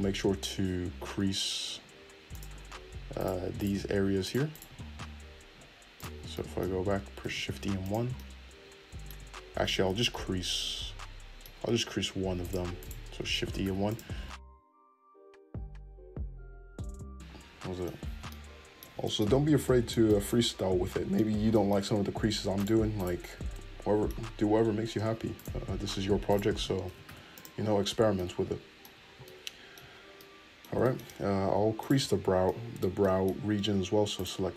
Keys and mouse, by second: 2.3 click, 2.7 middle click, 3.2 click, 3.3 shift+middle click, 3.5 shift+click, 3.6 shift+middle click, 4.2 shift+click, 4.3 shift+middle click, 4.5 shift+click, 4.6-5.9 middle drag, 5.9-7.9 drag, 7.2 shift+e, 7.9-12.4 middle drag, 8.0 Tab, 9.6 ctrl+z, 10.0 ctrl+z, 12.4 click, 12.5 shift+middle click, 12.8 shift+click, 12.8-21.2 shift+middle drag, 13.4 shift+e, 14.1 Tab, 20.5 Tab, 21.2 click, 21.3 shift+middle click, 21.6 shift+click, 21.7-25.3 shift+middle drag, 22.2 shift+e, 25.3 shift+click, 25.7 middle click, 26.3 shift+click, 26.3-27.5 shift+middle drag, 26.8 shift+e, 28.0 Tab, 31.0 Tab, 31.8 alt+click, 31.9-34.1 middle drag, 34.1 click.